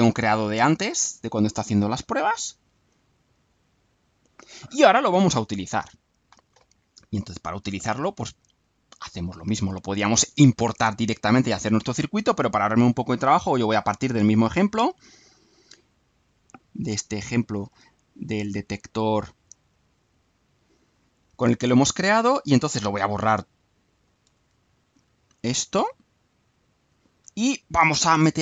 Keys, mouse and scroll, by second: 1.4 click, 2.7 click, 8.5 click, 10.2-12.0 drag, 19.6 click, 20.9-22.4 right drag, 22.7-24.2 drag, 24.2 Delete, 25.5 click, 26.5-27.0 drag, 27.2 Delete.